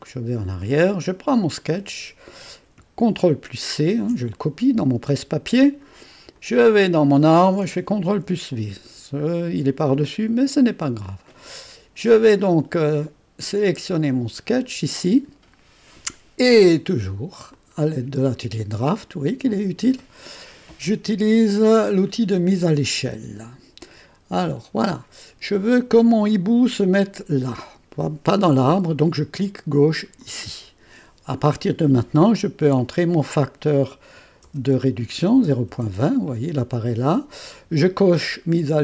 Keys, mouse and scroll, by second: 1.6 click, 3.9 ctrl+c, 6.3 click, 8.0 ctrl+v, 8.7-10.0 scroll down 1, 10.0-13.6 drag, 14.6-15.8 drag, 17.5 click, 18.8 click, 24.3 click, 30.2 click, 34.2-35.7 typing.